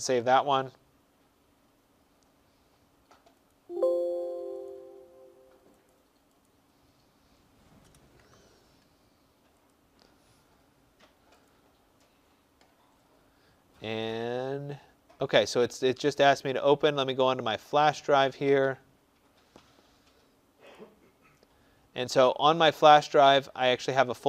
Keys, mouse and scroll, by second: 3.3 click, 4.5 click, 5.8 click, 6.3 click, 7.7 BackSpace, 8.1 BackSpace, 9.6 click, 11.4 click, 16.3 click, 17.8 middle click, 17.9-19.0 scroll, 19.0-20.6 scroll, 20.6 click, 23.6 click, 23.8 click.